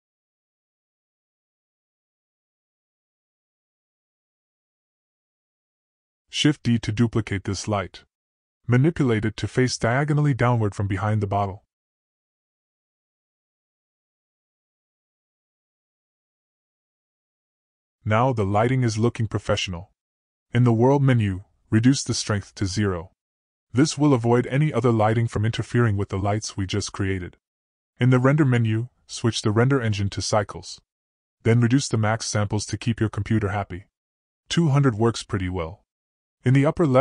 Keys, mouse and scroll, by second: 0.3 click, 1.5 click, 4.1 middle click, 4.2-4.6 scroll up 1, 5.1-5.5 middle drag, 7.3 shift+d, 11.1-11.5 middle drag, 12.0 g, 13.4-13.8 middle drag, 14.1 r, 15.3 g, 16.5 g, 17.9 middle click, 18.9 click, 21.7-22.9 drag, 24.7 click, 27.1-28.2 drag, 29.6-31.5 drag, 31.2 0, 33.2-35.2 drag, 35.2 0, 35.9-37.0 drag.